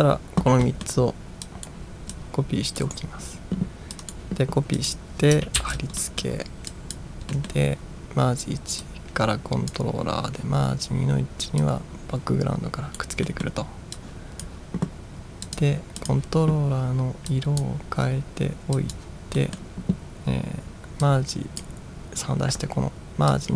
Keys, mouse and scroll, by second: 0.7 middle drag, 1.5 drag, 2.2-3.0 drag, 3.0 right click, 4.0 click, 4.8 click, 5.6 ctrl+v, 6.1 middle drag, 6.8 drag, 7.4 middle drag, 8.9-9.7 drag, 11.6-13.0 drag, 13.3 middle drag, 14.0 click, 15.5 click, 16.1 click, 17.4-17.8 drag, 19.0 click, 19.6 middle drag, 21.1 click, 23.4-23.5 drag.